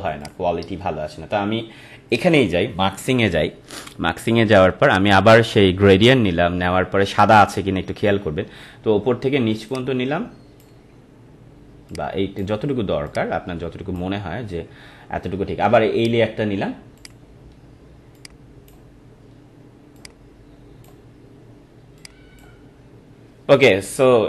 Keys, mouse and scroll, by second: 4.9 click, 9.6-24.2 drag.